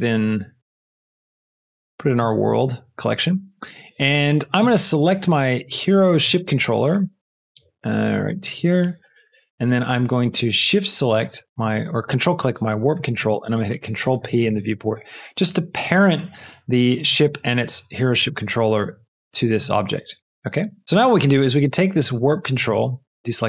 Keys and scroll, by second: 0.0 f, 14.3 ctrl+p, 14.8 ctrl+Return, 22.7 a.